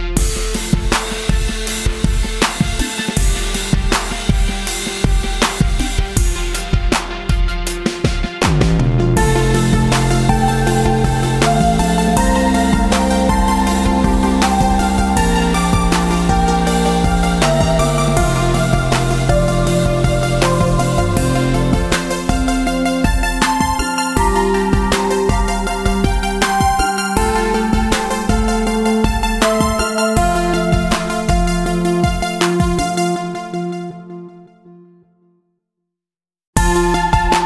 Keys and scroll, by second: 1.7 space, 2.2 space, 11.2 space, 11.7 space, 13.0 a, 15.5 ctrl+shift+z, 17.3 v, 22.3 ctrl+-, 22.4 ctrl+-, 24.5 space, 27.5 ctrl+-, 28.6 ctrl+space, 29.3 ctrl+space, 29.9 space, 33.5 Tab, 35.7 Tab.